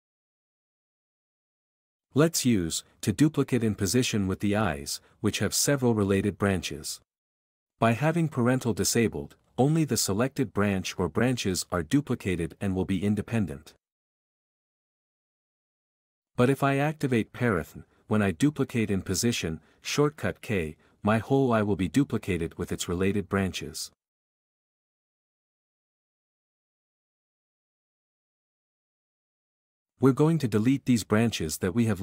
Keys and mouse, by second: 0.9 b, 1.5 x, 4.0 alt+click, 5.0 r, 5.1 r, 5.8 Escape, 10.4 k, 15.4 x, 20.9 k, 25.8-28.3 typing, 26.5 click, 26.9 click, 28.0 Escape, 29.9 q, 31.4 alt+click.